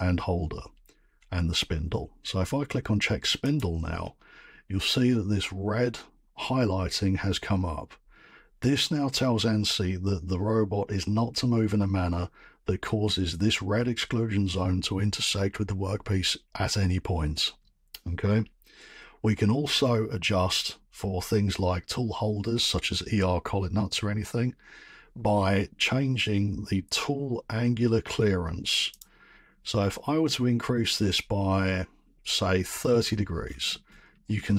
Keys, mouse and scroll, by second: 3.5 click, 8.2-8.5 scroll, 20.2 middle click, 20.3-25.6 scroll, 28.9 click, 32.9-34.5 scroll.